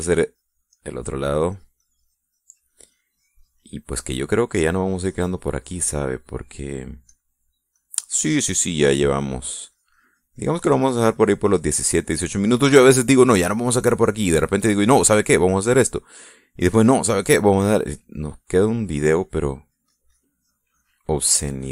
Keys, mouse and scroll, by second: 0.1-1.1 drag, 1.2 click, 2.0 middle click, 2.8-6.6 drag, 7.0 click, 8.3 click, 9.0 click, 10.0-13.0 drag, 13.3 middle click, 14.1 middle click, 14.8-17.5 drag, 17.8-18.8 drag, 18.9 middle click, 19.5 middle click, 20.9-21.7 drag.